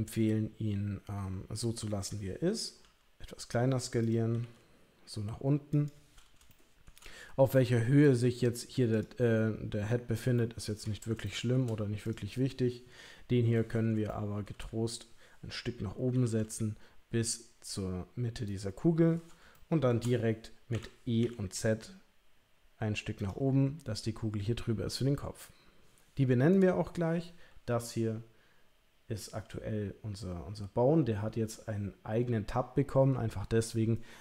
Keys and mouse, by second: 2.8 s, 4.3 g, 6.5 shift+middle click, 8.9 click, 10.6 shift+middle click, 11.2 shift+middle click, 12.0 click, 14.1 shift+middle click, 16.1 g, 19.5 shift+middle click, 20.7 e.